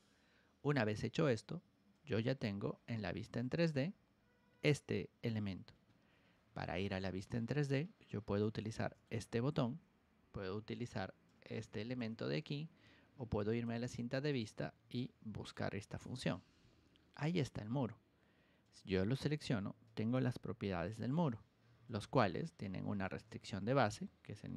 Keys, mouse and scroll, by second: 1.9 click, 3.2 middle click, 3.5 middle click, 4.1 middle click, 6.0 ctrl+1, 6.6 click, 7.7 ctrl+click, 8.7 ctrl+shift+click, 9.6 Escape, 10.3 ctrl+1, 10.7 click, 11.2 ctrl+click, 12.1 Escape, 13.4 click, 13.9 ctrl+1, 14.2 click, 14.9 ctrl+click, 15.9 Escape, 16.8 middle click, 17.1 middle click, 18.6 click, 21.1 ctrl+1, 21.8 click, 23.0 ctrl+click.